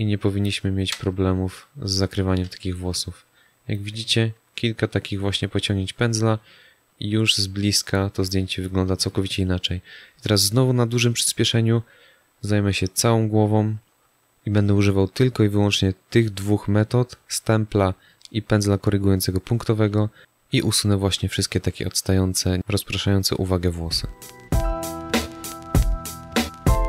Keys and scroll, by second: 2.4 space, 8.1 space, 20.4 space, 24.5-25.8 typing.